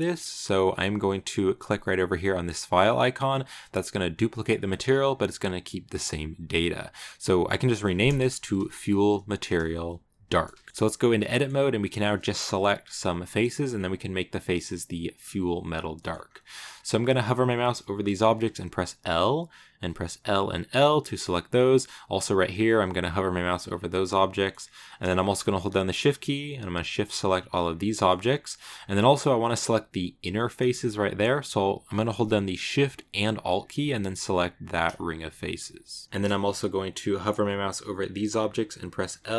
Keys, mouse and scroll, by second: 4.0-8.1 drag, 8.1 BackSpace, 10.7-14.2 middle drag, 15.8 shift+middle click, 16.1-16.8 scroll up 4, 16.4 shift+middle click, 18.9 l, 20.0 l, 20.7 scroll up 1, 20.9-21.9 middle drag, 21.9 click, 22.5 click, 23.6 scroll down 2, 23.7 middle click, 24.5 scroll up 2, 25.0 shift+middle click, 25.2 scroll up 3, 26.4 shift+right click, 26.8 shift+right click, 27.3 shift+right click, 27.7-28.9 shift+middle drag, 28.9 scroll up 1, 30.4-33.5 middle drag, 34.4 alt+shift+right click, 36.0-37.3 scroll down 2, 38.9 l, 39.1 scroll down 2.